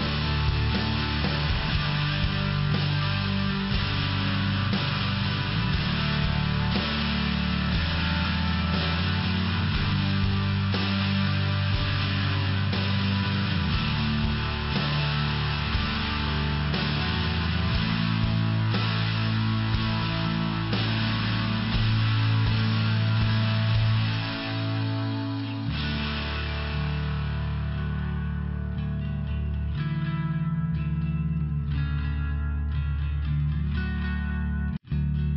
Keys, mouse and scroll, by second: 1.5 click, 1.6 click, 4.5 click, 6.1 click, 6.7 click, 7.3 click, 7.7 click, 8.5 click, 9.3 click, 10.0 click, 11.1 click, 11.9 click, 12.5 click, 13.2 click, 13.7 click, 13.8 click, 14.1 click, 14.2 click, 14.7 click, 14.8 click, 15.7 click, 15.8 click, 16.1 click, 16.2 click, 16.6 click, 16.7 double click, 17.0 double click, 17.0 double click, 17.4 double click, 17.5 double click, 17.9 double click, 18.0 double click, 18.3 double click, 18.4 double click, 18.7 double click, 18.8 double click, 19.1 double click, 19.3 double click, 19.7 double click, 19.9 double click, 20.4 click, 20.5 click, 20.9 click, 21.0 click, 21.4 click, 21.5 click, 22.0 click, 22.1 click, 22.5 click, 22.7 click, 23.3 click, 23.4 click, 23.8 click, 23.9 click, 24.2 click, 24.4 click, 24.8 click, 25.3 click, 25.4 click, 26.0 click, 28.2 click, 28.5 click, 29.0 click, 29.1 click, 29.4 click, 29.6 click, 30.1 click, 30.8 click, 31.4 click, 31.5 click, 32.2 click.